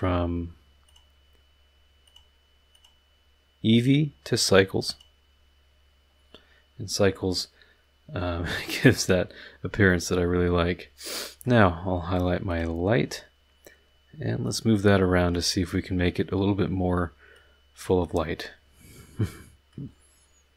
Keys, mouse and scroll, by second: 0.8 click, 2.0 click, 2.7 click, 3.7 click, 4.9 click, 8.6 middle click, 9.9-10.3 middle drag, 10.3-10.7 drag, 10.7-11.0 middle drag, 11.0-11.6 drag, 12.5 click, 14.4-15.5 drag, 17.3-18.0 drag, 18.0-19.9 middle drag, 19.9 scroll down 1.